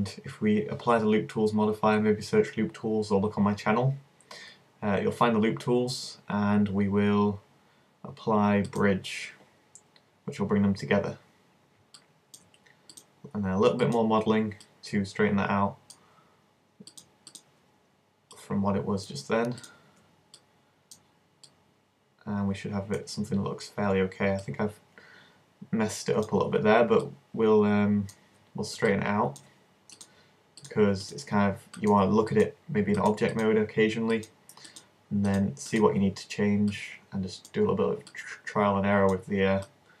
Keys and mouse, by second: 0.9-3.1 middle drag, 8.7-12.1 drag, 10.5-13.9 middle drag, 13.9-16.0 right drag, 14.7-17.0 drag, 16.4-23.0 middle drag, 23.0 click, 24.5-27.9 middle drag, 30.0-38.7 middle drag, 38.1-39.7 drag, 38.1 right click, 39.7-40.0 middle drag.